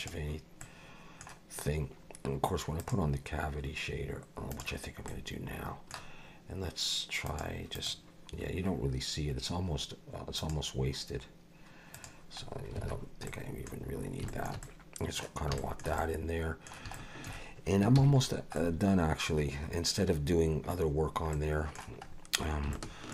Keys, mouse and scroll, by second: 0.0 click, 0.6 middle click, 2.8 click, 5.1 middle click, 7.2 click, 7.7 click, 10.4 click, 11.9 click, 12.8 alt+a, 13.3 middle click, 13.8-14.2 scroll down 3, 14.3 shift+middle click, 14.6 middle click, 15.6 shift+middle click, 16.0 middle click, 16.9 shift+middle click, 18.0 ctrl+s, 18.2-18.6 scroll down 3, 18.6 middle click, 20.9-21.3 scroll down 2, 21.3 middle click, 22.1 scroll up 3, 22.7 shift+middle click.